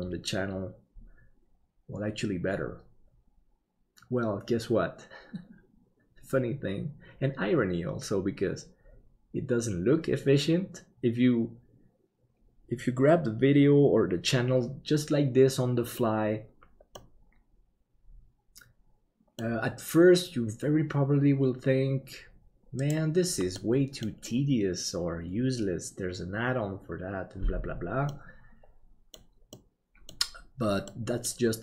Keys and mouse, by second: 17.0-20.1 middle drag, 23.5 middle click, 28.1-29.2 middle drag, 29.5 middle click, 30.9 middle click.